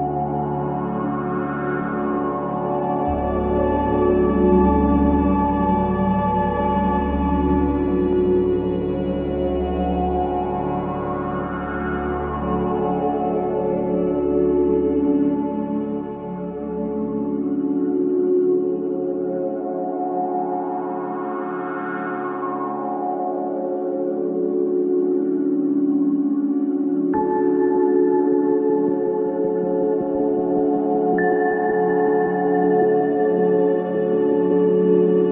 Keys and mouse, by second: 2.2 shift+a, 13.2 s, 20.7 g, 24.3 click, 25.2 s, 28.8 s.